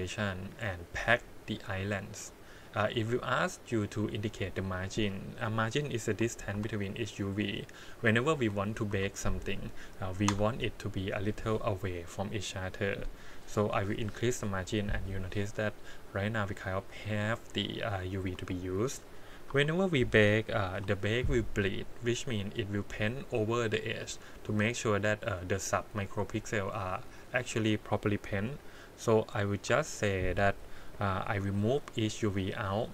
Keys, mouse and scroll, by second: 0.1-1.8 drag, 18.2 click, 19.5 3, 20.7 l, 22.4-23.8 scroll up 5, 24.1-25.1 scroll down 3, 26.5 g, 29.0 click, 29.7 l, 31.4 g.